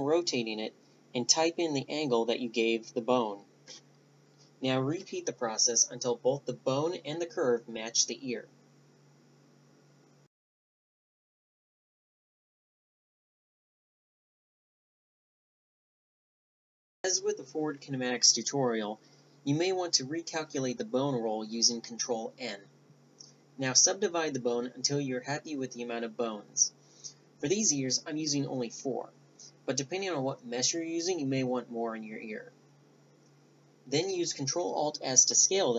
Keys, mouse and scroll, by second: 7.9-10.8 right drag, 8.8 Tab, 10.0 r, 12.0 Tab, 12.1 right click, 12.1 r, 13.0 right click, 13.1 Tab, 13.3 r, 14.0 Tab, 14.0 right click, 14.2 Tab, 14.3 Tab, 14.4 r, 15.1 s, 15.9 middle click, 16.0 right click, 16.1 Tab, 16.1 click, 16.6 ctrl+n, 18.0 ctrl+n, 19.1 middle click, 20.2-21.6 middle drag, 21.6 right click, 22.8 ctrl+n, 23.3 ctrl+n, 23.9 ctrl+n, 26.9 middle click, 27.7 Tab, 27.8 Tab, 28.2 w, 28.8 w, 31.3 ctrl+alt+s, 34.4 middle click, 34.9 a, 35.2 Tab.